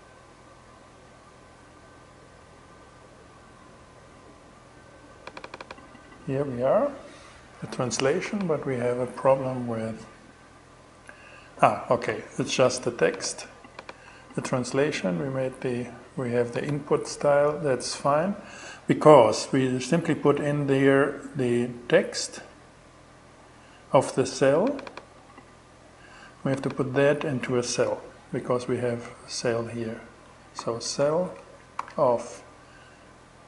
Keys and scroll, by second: 29.8-30.9 typing, 31.2 alt+5.